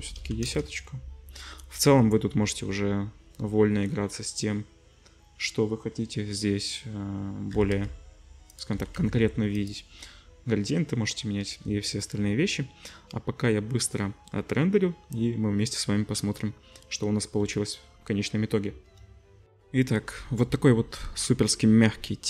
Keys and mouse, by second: 7.5 g, 8.6-9.8 middle drag, 8.8 r, 11.4 z, 19.5 ctrl+shift+F1.